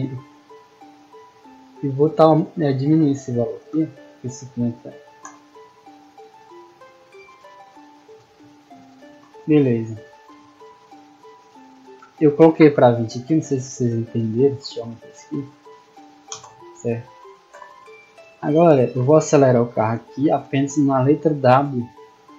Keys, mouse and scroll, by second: 0.2 click, 2.4 click, 5.5-8.5 typing, 13.1 middle drag, 13.2 scroll down 2, 13.8 scroll down 2, 14.2 right click, 14.5 s, 15.4 click, 15.7 middle click, 18.0 a, 18.6 w, 19.9 space.